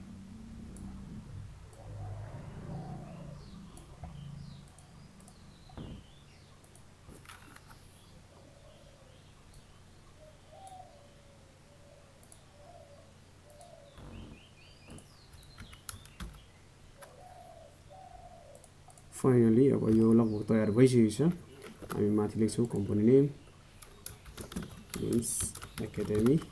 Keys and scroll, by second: 17.6 ctrl+a.